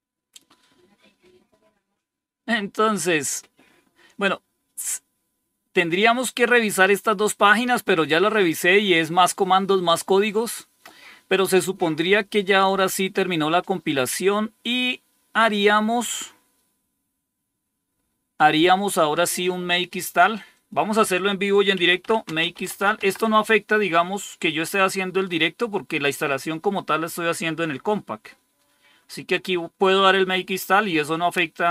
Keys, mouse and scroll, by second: 14.7-16.2 scroll up 2, 16.2-17.8 scroll up 1, 17.8 scroll down 3, 20.4 click, 21.4-23.8 typing.